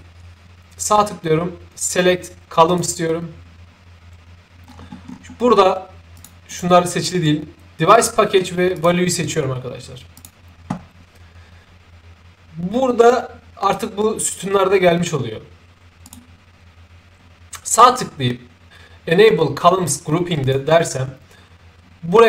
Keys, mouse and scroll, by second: 2.7 click, 4.6-5.1 scroll down 4, 5.1 scroll up 2, 6.2 click, 6.5 click, 7.9 click, 8.7 click, 10.1 click, 16.0 right click, 20.4 click.